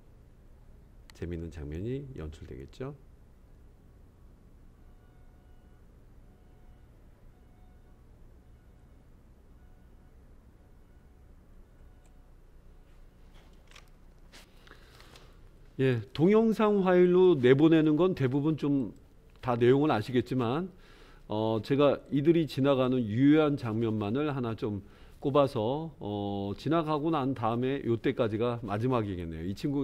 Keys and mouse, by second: 12.6 space, 17.0 click, 19.1 click, 22.1-29.8 drag.